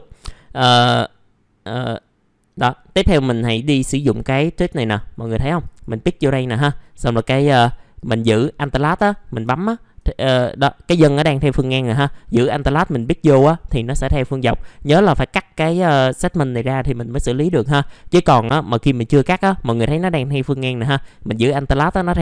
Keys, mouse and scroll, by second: 0.1-0.4 scroll up 1, 0.4 middle click, 5.6 click, 7.9 alt+click, 9.1 scroll down 1, 9.5 alt+middle click, 10.2-12.0 scroll up 1, 12.8 alt+click, 14.5 middle click, 16.3-17.4 scroll down 1, 17.5 alt+middle click, 18.1-21.0 scroll up 1, 21.7 alt+click.